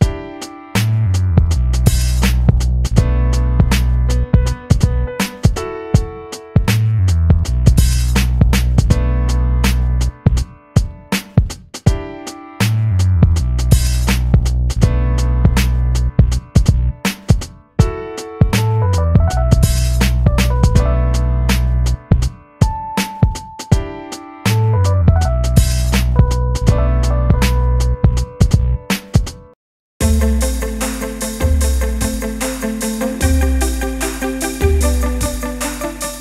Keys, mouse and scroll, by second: 0.0-1.5 drag, 1.5-4.5 ctrl+middle drag, 7.3 click, 8.1 x, 10.6 shift+a, 15.9 g, 21.7 click, 22.9 s, 26.8 KP_1, 28.3 g, 34.6 click.